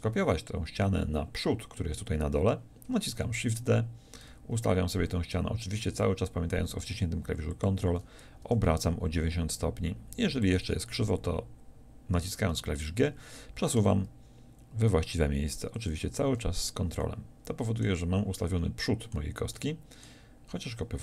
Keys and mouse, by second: 3.1 shift+d, 7.6-10.4 drag, 8.4 r, 10.5-12.5 drag, 12.5 g.